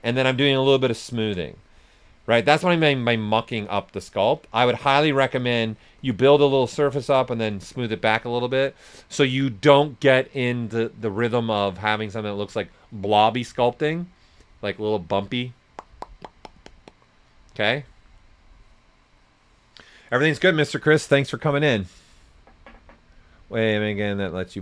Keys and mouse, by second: 0.2-2.3 shift+drag, 2.3 right click, 4.5 s, 4.6 click, 6.3 shift+click, 7.5 right click.